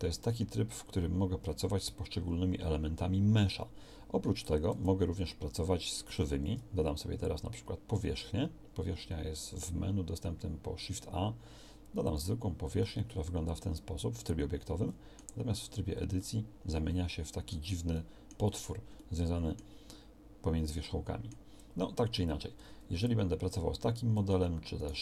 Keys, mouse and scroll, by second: 4.7 Tab, 6.3 shift+a, 14.1 middle click, 15.3 Tab, 22.5 Tab.